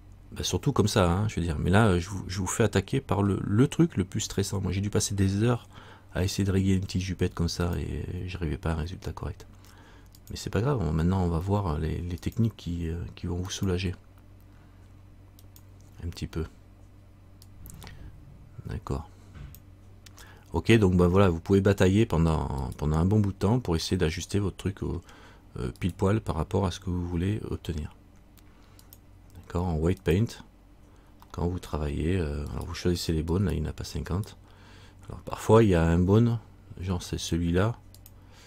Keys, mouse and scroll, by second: 21.8-22.8 scroll up 1, 22.8 right click, 24.1 middle click, 26.0 right click, 27.2 Tab, 29.0 click, 31.4 middle click, 32.6 right click, 35.5 middle click, 37.2 right click, 37.2 scroll down 1, 38.1 click.